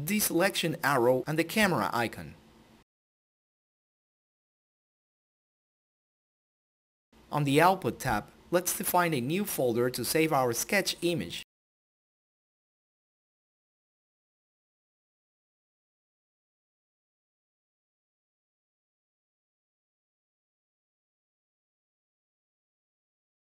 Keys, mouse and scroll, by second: 2.1 click, 6.6 click, 7.3 click, 14.2-15.4 typing, 15.8 Return, 17.7 click, 19.4-22.6 typing.